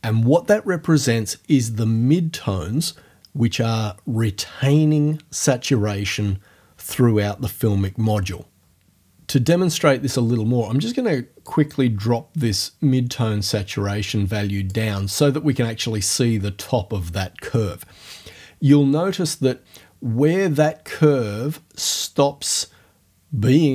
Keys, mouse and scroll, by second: 11.4-14.9 drag.